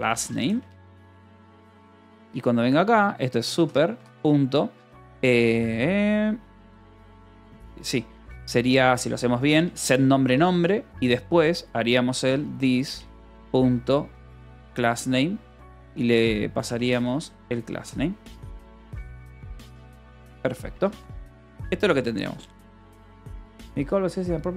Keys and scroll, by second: 0.0-1.7 typing, 2.1 Return, 3.2 u, 3.8 ., 9.9 Return, 10.1 Escape, 10.5 o, 11.8-13.9 typing, 14.2 Return, 15.9-18.1 typing, 19.8 Return, 20.3 ;, 20.5 Escape, 21.4 ctrl+s, 23.1 k.